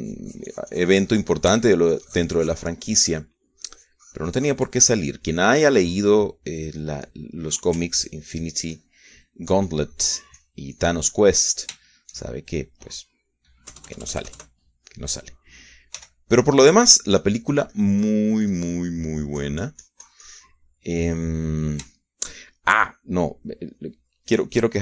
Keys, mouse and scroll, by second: 3.5-6.5 ctrl+drag, 6.6 ctrl+middle click, 7.3 middle click, 7.9-9.2 middle drag, 9.5-11.2 ctrl+drag, 11.3 ctrl+click, 12.1-13.2 ctrl+drag, 13.6-17.4 shift+middle drag, 15.5 KP_Add, 17.8 f, 18.3 click, 18.9-22.4 drag, 22.5-24.7 middle drag.